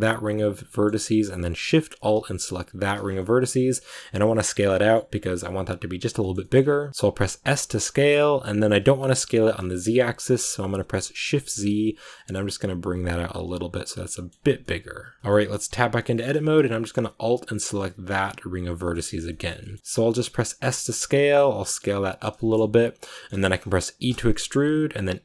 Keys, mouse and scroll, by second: 0.6 middle click, 0.9 scroll up 1, 1.0-2.7 middle drag, 2.7 alt+shift+right click, 2.9 scroll down 1, 3.4 middle click, 4.3 scroll down 4, 4.6 middle click, 5.3-5.8 scroll up 2, 6.1 shift+middle click, 6.5 scroll up 1, 6.9-7.4 scroll down 2, 7.4 s, 13.9 middle click, 14.2 scroll down 3, 14.3 Tab, 14.5 middle click, 15.2-15.6 shift+scroll up 2, 15.6 Tab, 15.9 shift+middle click, 16.1 scroll up 2, 17.9 alt+right click, 18.7 middle click, 19.0-19.6 scroll down 2, 19.6 middle click, 19.8 s, 20.5 s, 22.2 shift+middle click, 22.6-22.9 scroll up 2, 23.0 middle click, 24.0 e.